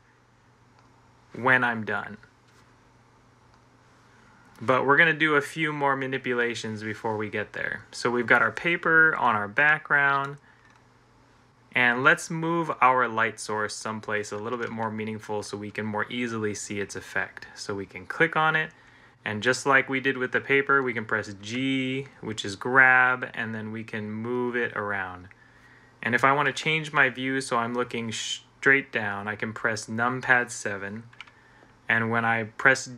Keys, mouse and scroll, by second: 21.3 g, 28.8 7.